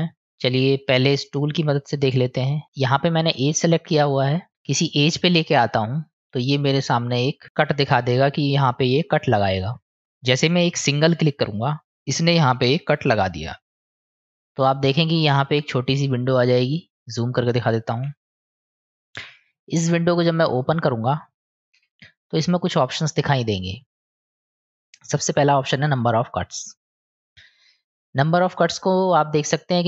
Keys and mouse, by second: 3.6 click, 11.4 click, 26.9 click, 28.1 click, 28.2 click, 28.4 click, 28.6 click, 29.3 click, 29.5 click, 29.6 click, 29.8 click.